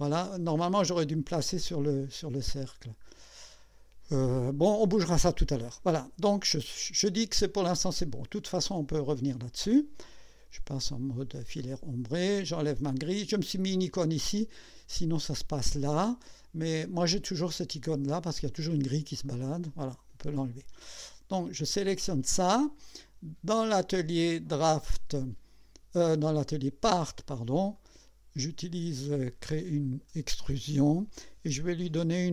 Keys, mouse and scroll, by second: 2.3-2.9 scroll down 4, 6.8 scroll down 1, 7.5-8.7 drag, 9.0 click, 11.6 right click, 15.8 click, 17.5 click, 18.2 click, 18.7 click, 19.2 click, 24.7 click, 26.2 click, 27.8 click.